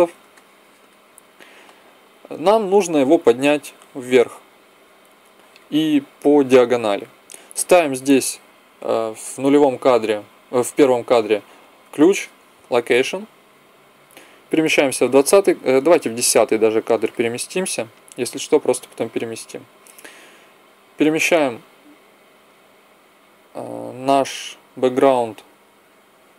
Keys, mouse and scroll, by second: 11.8 i, 14.7-16.7 drag, 20.7-22.6 drag.